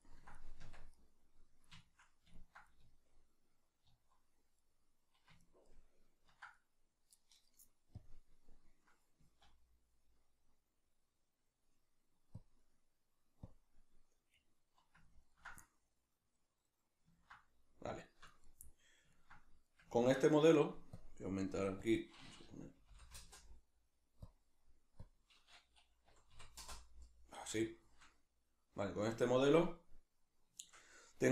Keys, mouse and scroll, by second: 0.6 Tab, 0.9 middle click, 2.0-8.0 middle drag, 2.8 z, 8.0 click, 9.2 z, 11.7 middle click, 12.4 click, 12.6 middle click, 13.5 click, 14.2-20.9 middle drag, 20.9-27.8 drag, 23.3 Return, 26.7 Return, 27.8-29.5 shift+middle drag, 29.5-31.3 middle drag.